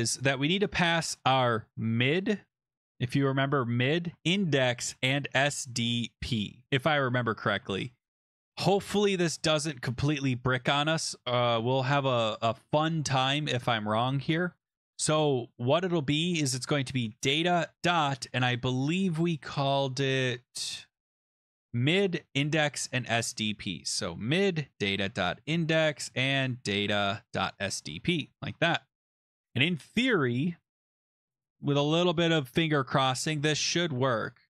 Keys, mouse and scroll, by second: 0.2 click, 1.4-6.1 typing, 3.8 click, 8.4-9.2 scroll, 14.5 click, 15.8 click, 16.5-18.0 typing, 18.5 scroll down 7, 18.9-19.6 scroll, 20.7 scroll, 21.9-23.8 scroll, 24.3 click, 24.5-27.8 typing, 28.3 click, 29.3 click, 33.7-34.4 typing.